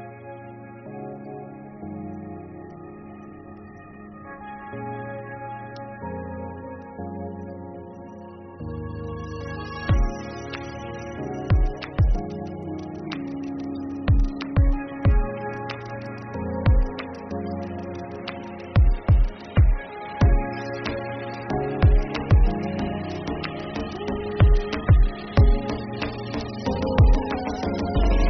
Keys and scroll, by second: 1.8 ctrl+v, 2.2 Return, 9.4 ctrl+v, 9.7 Return, 15.1 Return, 20.4 ctrl+c, 24.7 ctrl+v, 25.3 Return, 28.1 ctrl+v.